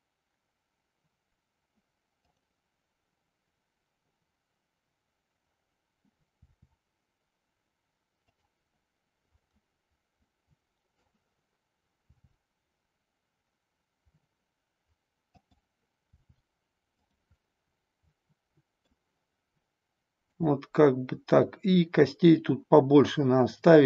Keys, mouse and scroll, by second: 2.2-5.4 drag, 6.5 r, 8.4 click, 9.4-11.1 middle drag, 12.1 r, 15.5 click, 16.1 r, 17.1 click, 17.4-18.9 middle drag, 20.2-23.2 drag.